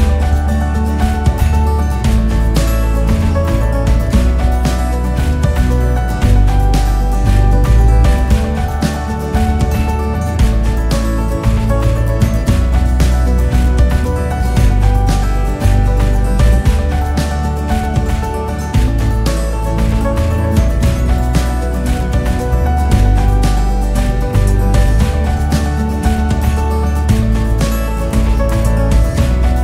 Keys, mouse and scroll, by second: 1.3 s, 2.5 click, 3.2-4.7 typing, 6.2 s, 6.9 s, 9.3-9.6 KP_6, 10.2 KP_4, 10.6 click, 11.2 e, 13.2 s, 14.7 click, 14.9 scroll down 2, 15.7 Tab, 16.2-16.9 drag, 16.9 KP_6, 17.0 KP_6, 17.2-22.3 KP_6, 22.8-23.5 drag, 23.5-26.3 KP_6, 26.7-27.2 scroll down 3, 27.2-29.6 scroll up 2.